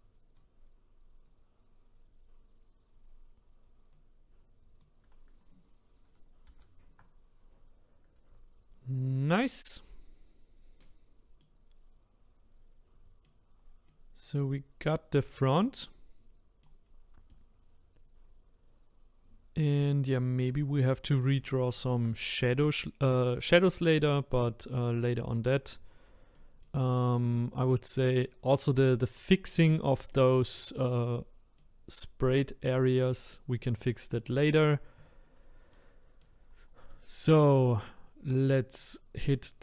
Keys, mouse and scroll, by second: 10.5-11.0 scroll down 6, 11.4-13.5 middle drag, 13.5-13.9 scroll down 2, 13.9-16.8 middle drag, 16.8-17.3 scroll up 2, 17.3-20.7 middle drag, 21.6 shift+middle click, 22.2-22.6 scroll up 2, 22.6-25.6 middle drag, 25.8-26.3 scroll up 2, 26.3 middle click, 26.9-27.4 scroll down 2, 27.4-28.8 middle drag, 28.8-30.1 scroll up 1, 30.1-33.1 middle drag, 33.3-36.5 middle drag, 36.5-36.9 scroll down 2, 36.9-39.6 middle drag.